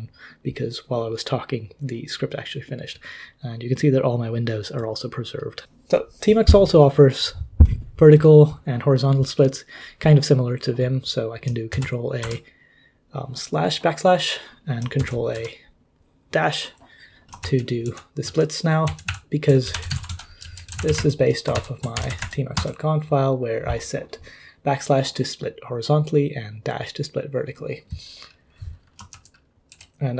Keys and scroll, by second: 11.7 ctrl+a, 12.2 \, 15.0 ctrl+a, 15.3 -, 17.4 ctrl+k, 17.8 ctrl+h, 18.2 ctrl+l, 18.8 ctrl+j, 19.1 ctrl+h, 19.4-22.7 typing, 29.1 ctrl+l, 29.7 ctrl+k.